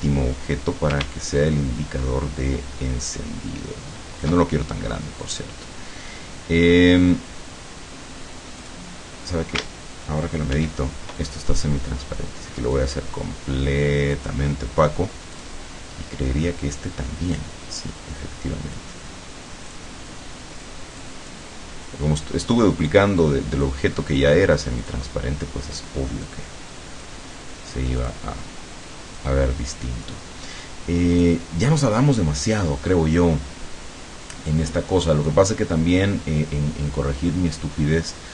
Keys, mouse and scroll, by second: 1.4-4.5 ctrl+shift+drag, 8.6 click, 10.6 ctrl+shift+f, 12.8-14.4 drag, 15.4 click, 17.8-19.0 drag, 19.7 click, 20.6 click, 22.9 click, 24.8 click, 26.2-27.2 drag, 28.0 click, 29.2-30.3 drag, 31.2 click, 34.3 click, 35.1-36.2 drag.